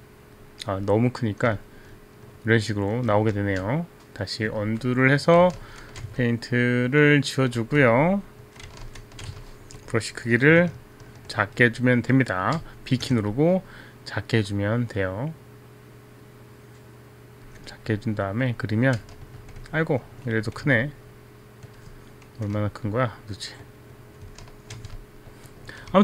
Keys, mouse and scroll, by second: 1.7 alt+click, 3.4 ctrl+z, 4.9 alt+click, 5.7 ctrl+z, 7.5 alt+right click, 8.4 alt+click, 9.1 ctrl+z, 10.4 click, 11.1 alt+click, 13.1 b, 13.4 b, 13.6 click, 18.8 click, 20.4 right click, 22.1 right click, 23.1 alt+click, 24.8 ctrl+z, 25.1 alt+click.